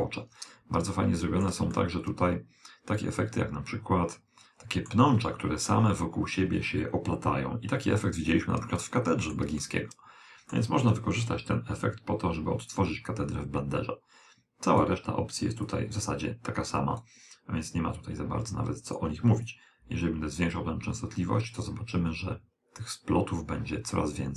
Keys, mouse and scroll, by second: 1.0-3.5 middle drag, 8.8-11.4 middle drag, 12.8 click, 15.7 click, 17.7 click, 19.5 click.